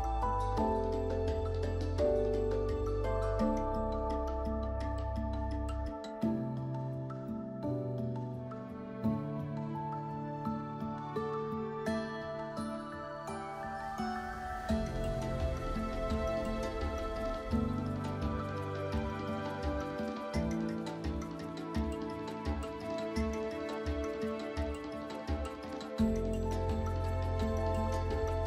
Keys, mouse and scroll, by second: 0.2 scroll up 1, 2.1 scroll down 1, 2.7-8.7 scroll up 1, 8.7 right click, 11.5 scroll up 1, 12.1 click, 14.5 right click, 15.3 w, 15.5 click, 16.5 right click, 16.5 scroll down 1, 16.7 scroll up 1, 25.9 scroll up 1, 26.6 scroll down 1, 27.7 scroll up 1, 28.0 scroll down 1.